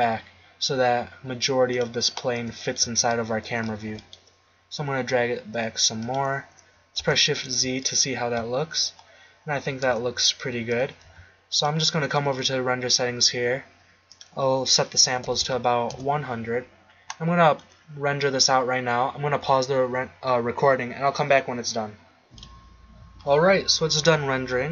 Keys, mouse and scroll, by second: 2.4-3.8 middle drag, 3.8 g, 7.0 shift+z, 10.1 KP_0, 11.1 z, 15.4 0.